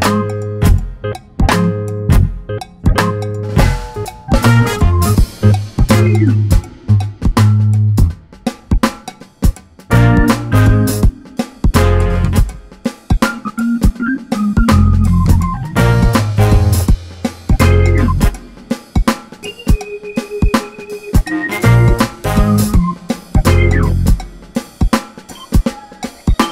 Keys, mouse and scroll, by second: 2.0 click, 2.7 scroll up 2, 3.9 ctrl+shift+click, 7.6-8.7 drag, 10.6 `, 12.2 click, 12.4 Delete, 13.1 click, 14.6 scroll down 1, 16.7-22.3 drag, 17.5 scroll up 1, 25.1 click.